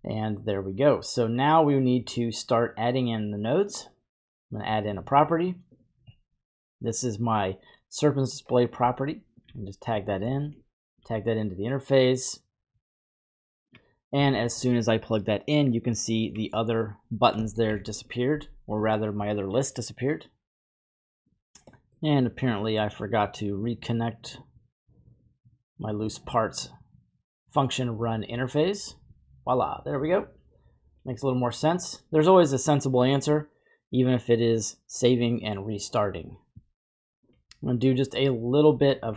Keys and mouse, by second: 3.7-5.9 drag, 4.7-6.7 typing, 6.2 middle click, 8.2 click, 8.8-9.5 typing, 9.0 alt+click, 10.6-11.0 alt+drag, 15.8-16.3 drag, 17.6 shift+r, 21.9 middle click, 24.4-25.3 drag, 26.1-28.5 drag, 38.3-39.1 drag.